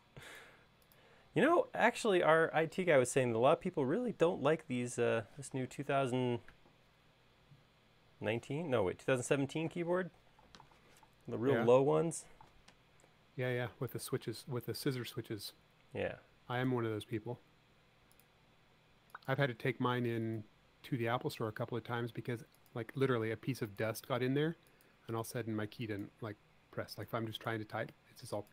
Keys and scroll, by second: 21.8 l, 24.4 space.